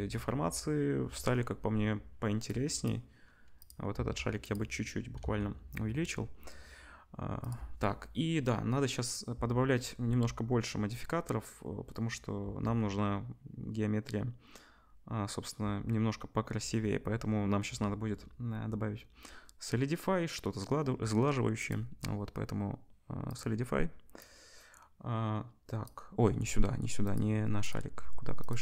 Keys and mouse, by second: 3.9 s, 5.2 ctrl+s, 21.6-25.9 drag, 27.1 click, 28.4-28.6 drag.